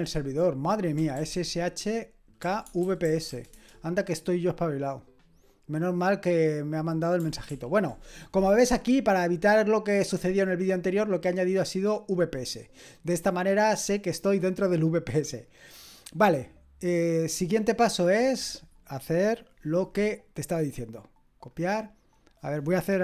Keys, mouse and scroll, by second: 0.9-3.7 typing, 7.5 ctrl+l, 10.8-12.0 drag, 12.5-13.3 scroll down 1, 13.3 click, 14.0-23.0 drag.